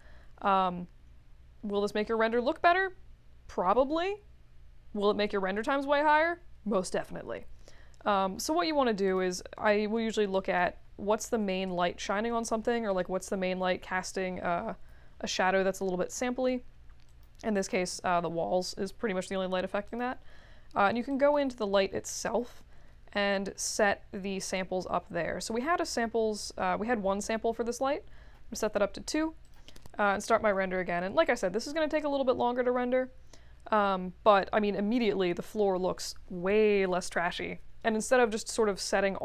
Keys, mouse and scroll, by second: 9.0 click, 10.3 click, 11.2 2, 11.4 Return, 17.0 click, 17.6 click, 19.8 click, 21.1 click, 27.8 2, 29.4 click.